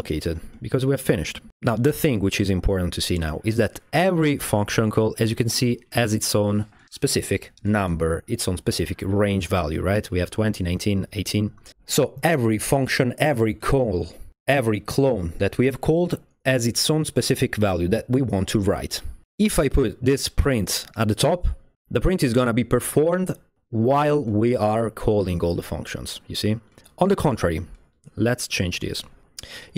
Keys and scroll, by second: 0.0-1.4 typing, 29.2 Return.